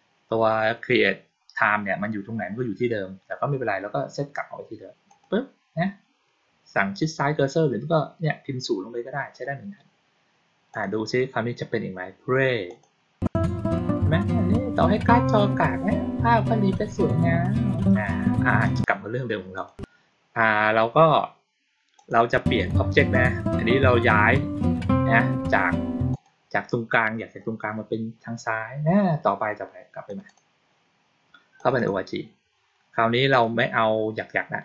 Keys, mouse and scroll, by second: 4.9 click, 10.6 click, 12.5 click, 18.5 click, 19.4 click, 21.8 click, 26.0 click, 29.9 click, 30.1 click, 31.4 click, 31.6 click, 33.2 click.